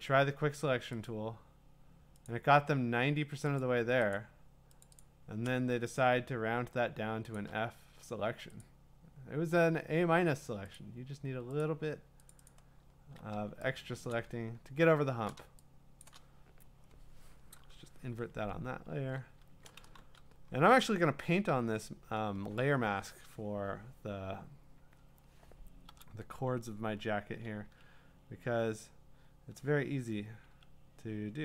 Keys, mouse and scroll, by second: 1.1 click, 2.3 click, 3.6 click, 4.1 click, 4.8 click, 5.0 click, 7.3 shift+click, 7.5 shift+click, 8.6 click, 10.7 click, 11.6 click, 12.3 click, 12.5 click, 14.1 click, 14.5-15.4 scroll, 17.6 ctrl+i, 19.0 ctrl+d, 19.2-20.0 scroll, 19.8 b, 20.8 click, 21.5 scroll, 25.9 [, 27.6 [, 30.5 ].